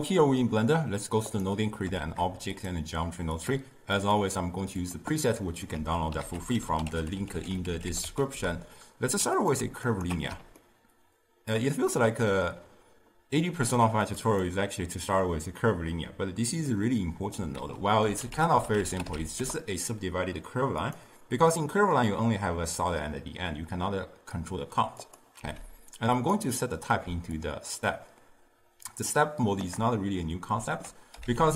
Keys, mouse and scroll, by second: 1.4 click, 2.8 shift+a, 3.5-5.8 drag, 5.8 x, 8.4 ctrl+a, 10.0 alt+shift+click, 10.7-14.3 ctrl+middle drag, 14.3-19.5 drag, 19.5 ctrl+a, 25.5 x, 26.3-31.5 drag.